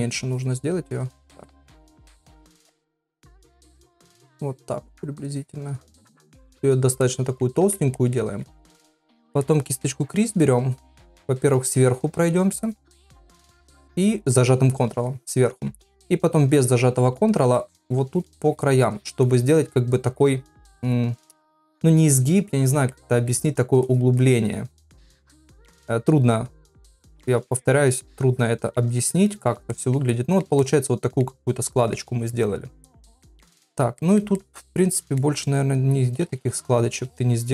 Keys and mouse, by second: 0.3 click, 1.2 ctrl+z, 1.6 middle click, 2.8 click, 3.7 click, 4.3 click, 5.3 click, 6.5 click, 7.0 middle click, 8.0 ctrl+middle click, 10.8 ctrl+click, 11.3 ctrl+click, 11.6 ctrl+click, 11.9 ctrl+click, 12.1 ctrl+click, 12.6 ctrl+click, 13.1 ctrl+click, 13.4 ctrl+click, 14.8 ctrl+click, 15.1 ctrl+click, 15.3 ctrl+click, 16.6 click, 17.0 click, 17.3 click, 17.6 click, 17.8 click, 18.1 click, 18.4 click, 18.9 click, 19.3 click, 20.1 click, 20.5 click, 20.8 click, 21.2 click, 22.9 ctrl+middle click, 23.9 click, 24.2 click, 24.4 click, 25.0 click, 25.6 middle click, 26.7 click, 27.0 click, 27.3 click, 27.9 click, 28.1 click, 29.0 click, 29.3 click, 29.7 ctrl+middle click, 30.1 middle click, 30.6 ctrl+middle click, 31.5 ctrl+middle click, 33.2 middle click, 34.0 ctrl+middle click, 34.4 middle click, 35.4 middle click, 36.5 shift+middle click.